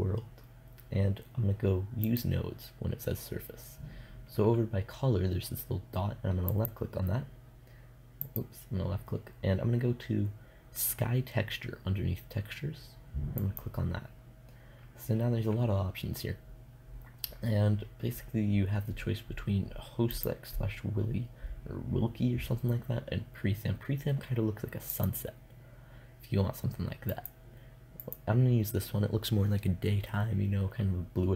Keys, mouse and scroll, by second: 1.5-5.9 drag, 6.0-9.6 drag, 16.0-21.9 drag, 26.5-28.3 drag.